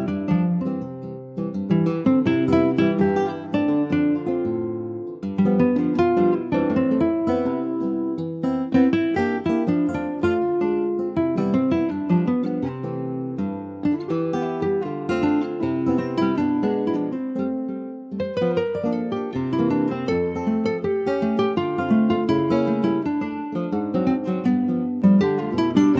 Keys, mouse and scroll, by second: 1.1-2.8 middle drag, 2.8 s, 6.6 scroll down 1, 6.9 middle click, 7.7 e, 11.3 click, 11.7 Tab, 11.9 click, 12.0 scroll down 4, 12.3 middle click, 12.7 ctrl+s, 12.8 click, 13.1 middle click, 13.3-14.0 scroll up 3, 13.4 Tab, 14.0 middle click, 14.4 click, 15.0 scroll down 1, 15.1 middle click, 15.6 shift+d, 16.7 middle click, 17.7 e, 21.1 click, 21.3 middle click, 22.1 click, 22.7 shift+middle click, 23.5 click, 23.9 scroll down 3, 24.1 middle click, 25.0 shift+click, 25.4-25.9 middle drag.